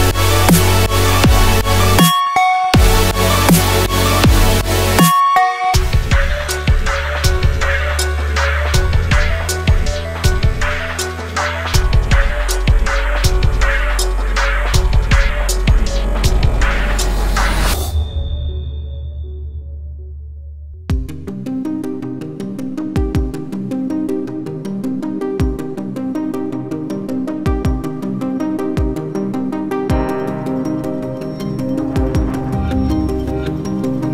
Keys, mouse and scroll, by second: 6.4 F4, 7.5 click, 8.3 F4, 9.0 click, 9.7 F4, 10.3 click, 11.0 F4, 11.6 click, 12.3 F4, 13.1 click, 16.8 shift+click, 17.4 shift+click, 17.8 shift+click, 18.3 shift+click, 18.8 shift+click, 20.5 click, 23.3 ctrl+g, 24.6 Down, 24.9 Up, 25.3 Down, 25.5 Down, 25.6 Down, 28.3 Up, 28.5 Up, 28.8 Up, 29.0 Up, 29.1 Up, 31.0-34.1 drag.